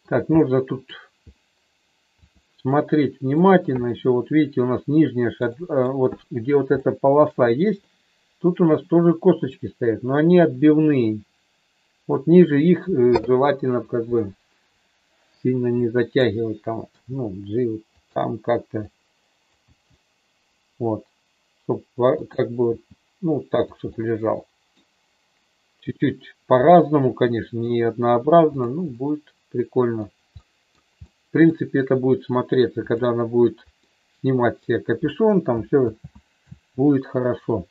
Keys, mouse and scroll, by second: 0.4 middle click, 2.2 click, 2.7 middle click, 3.9-5.9 middle drag, 6.8 shift+middle click, 7.8-10.4 middle drag, 15.8 click, 16.9 g, 17.9 click, 18.9 click, 19.7 g, 22.6 g, 23.5 click, 23.8-24.8 middle drag, 26.6-27.6 middle drag, 28.4 click, 28.9-30.0 middle drag, 30.4 middle click, 31.0 middle click, 32.8 click, 33.8 middle click, 35.8 ctrl+z.